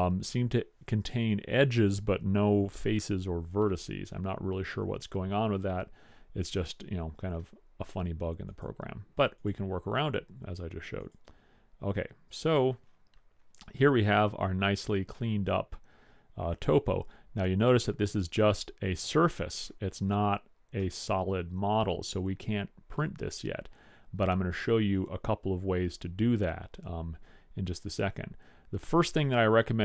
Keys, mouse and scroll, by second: 0.4-3.6 middle drag, 4.8 middle click, 8.6 click, 10.3 middle click, 11.1 click, 12.6 click, 12.9 click, 12.9 middle click, 13.7-17.3 middle drag, 21.0-22.8 middle drag.